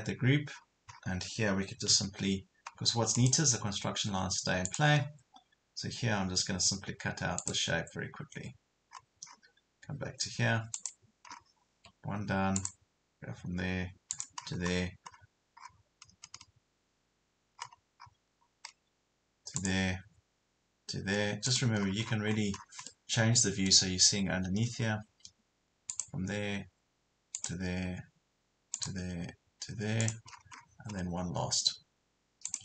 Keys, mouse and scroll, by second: 0.5 scroll down 1, 0.9 scroll up 1, 1.9-2.5 scroll up 1, 3.2 click, 7.4 click, 8.9 scroll up 1, 10.8 click, 11.3 scroll down 1, 11.8 Escape, 12.6 click, 14.4 scroll down 1, 15.6 scroll up 1, 19.6 click, 21.8 scroll down 1, 22.9 middle click, 24.9 scroll up 1, 25.1 Escape, 25.9 click, 30.3 scroll down 1, 30.9 scroll up 1, 32.5 click.